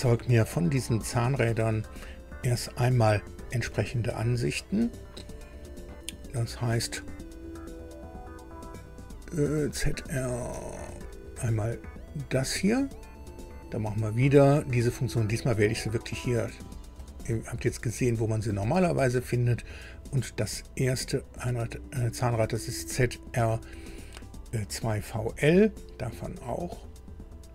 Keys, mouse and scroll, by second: 10.3 scroll down 2, 12.3 click, 17.0 click, 18.3 scroll down 2, 19.4-19.8 scroll up 2, 20.8 scroll up 2, 24.7 click.